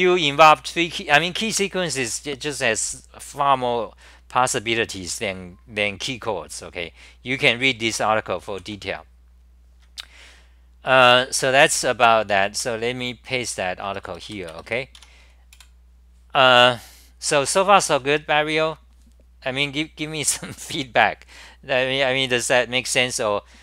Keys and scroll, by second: 12.6 super+w, 13.9 Return, 14.2 k, 15.1 Home, 15.5 super+r.